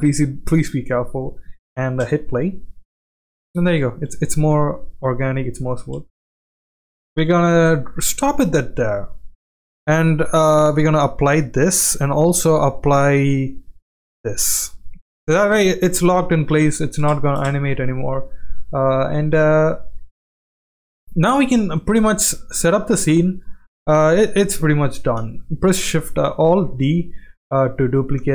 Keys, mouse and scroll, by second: 1.9 space, 3.1 space, 3.7 space, 4.6 space, 5.3-5.7 drag, 6.7 space, 6.9 space, 7.6 space, 8.0-9.1 middle drag, 10.8-11.4 drag, 12.2-14.3 drag, 15.7 g, 16.5 ctrl+z, 17.0 space, 18.2 click, 18.2 space, 19.0-19.8 middle drag, 20.4 shift+middle drag, 21.6 shift+middle drag, 22.4 shift+middle drag, 23.0 click, 23.4 click, 25.2 alt+d, 27.0 g, 28.2 g.